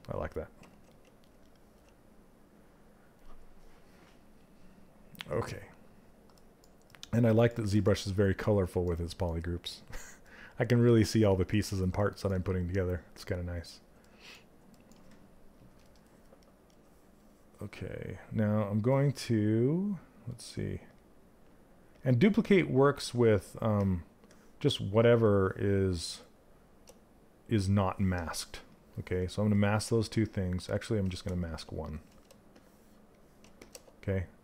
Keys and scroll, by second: 30.1 ctrl+z, 31.0 ctrl+z.